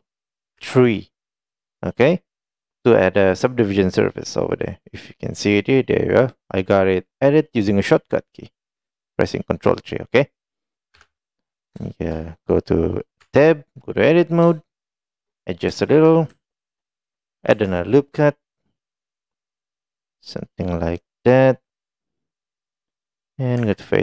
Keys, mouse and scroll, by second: 1.9 middle click, 5.1 click, 11.0 KP_1, 11.9 shift+middle click, 13.9 middle click, 15.0 shift+middle click, 21.8 middle click.